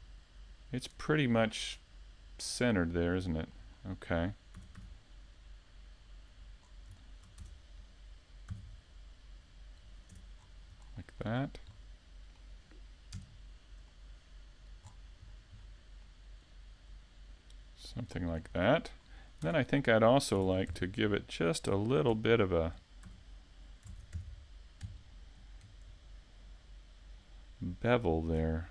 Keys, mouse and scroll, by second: 9.3 click, 9.9 middle click, 12.6 click, 13.3-13.7 scroll down 1, 14.0 middle click, 21.1-21.7 scroll up 3, 21.5 middle click, 23.2-23.7 scroll down 2, 23.5 middle click.